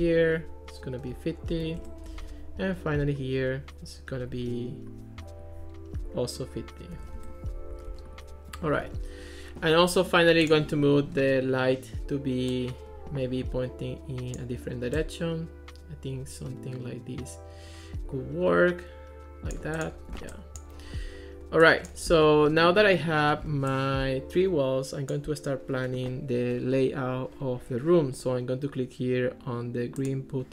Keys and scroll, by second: 1.3-2.2 typing, 7.0 5, 7.2 Return, 7.8 Escape.